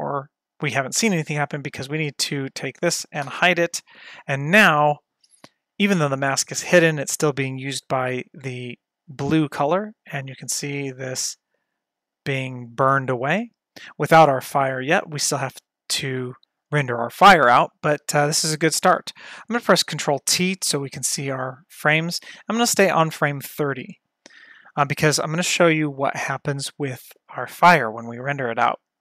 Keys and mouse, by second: 1.6 click, 3.3 h, 8.4-16.4 drag, 20.2 ctrl+t.